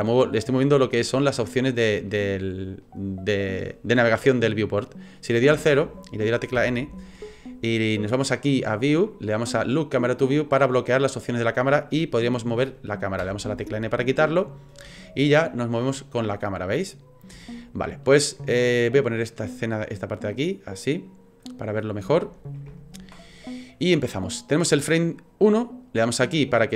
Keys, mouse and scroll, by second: 0.6 middle click, 2.1 shift+middle click, 5.5 KP_0, 6.6 n, 8.3 click, 10.3 click, 13.2 n, 15.0 shift+middle click, 17.4 shift+middle click, 18.5-18.8 scroll down 1, 19.5 click, 20.1 middle click, 22.1 shift+middle click, 22.8-25.2 ctrl+scroll down 2, 26.6 click.